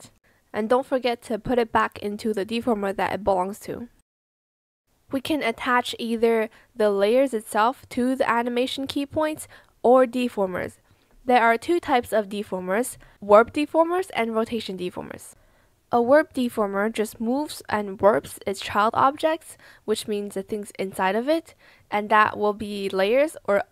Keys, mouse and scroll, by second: 2.8 ctrl+z, 10.4 z, 12.4 ctrl+z, 14.8 ctrl+z, 19.5 ctrl+z.